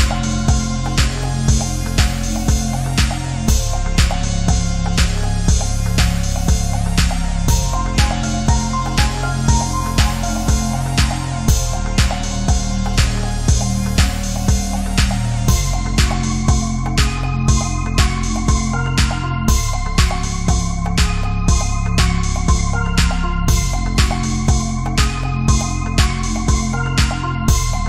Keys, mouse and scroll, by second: 1.5 click, 4.1 ctrl+d, 4.6-6.3 drag, 6.3 space, 6.4 ctrl+click, 6.7 space, 6.8 click, 6.9 space, 7.9 right click, 8.3 click, 8.6 right click, 9.6 click, 9.7 ctrl+z, 10.8 ctrl+d, 11.1-14.2 drag, 14.2-14.9 typing, 14.3 alt+click, 20.9-23.1 typing, 21.0 click, 21.4 click, 22.5 alt+click, 23.3 ctrl+click, 24.4 scroll down 1, 24.6 click, 25.4-26.9 typing, 25.9 click, 27.0 ctrl+z, 27.3-27.8 drag.